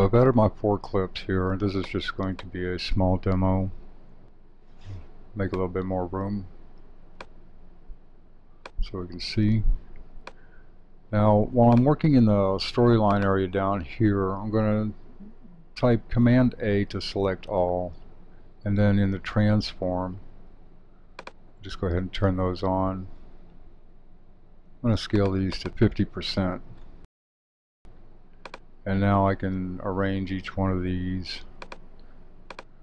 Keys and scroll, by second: 16.2 super+a, 25.8 Home.